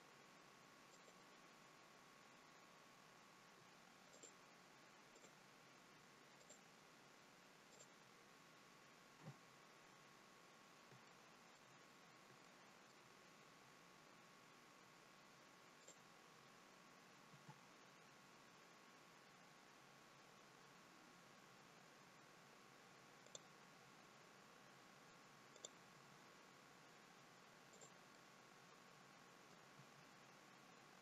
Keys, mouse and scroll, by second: 0.8 click, 1.3-1.9 scroll up 3, 1.9-3.4 scroll down 2, 4.0 shift+click, 5.1 shift+click, 6.2 shift+click, 7.6 shift+click, 9.1 f, 11.0 shift+middle click, 11.7-12.1 scroll up 3, 12.3 shift+middle click, 13.6-14.0 scroll up 1, 14.0 scroll down 1, 15.8 click, 17.2 g, 25.5 click, 25.9 g, 28.0 middle click, 29.7 g.